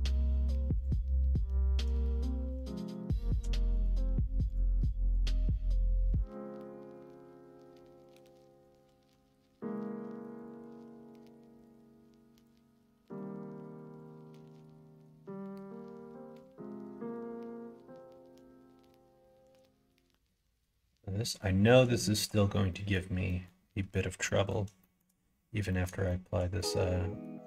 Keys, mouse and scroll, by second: 0.0 middle click, 0.8 click, 3.7-5.1 drag, 6.1 g, 8.6 click, 8.8 g, 10.3 click, 10.8 g, 12.3 click, 12.7 g, 14.3 middle click, 14.9 scroll up 1, 14.9-16.2 middle drag, 16.7 scroll up 1, 16.7 middle click, 17.5 middle click, 17.9 middle click, 19.2 shift+middle click, 19.9 middle click, 20.8-22.0 scroll up 4, 20.9 middle click, 21.2 middle click, 21.6 middle click, 22.0 shift+middle click, 22.6 middle click, 23.2 middle click, 24.2 middle click, 24.8 shift+middle click, 25.6 middle click, 26.1 shift+middle click, 26.6 middle click.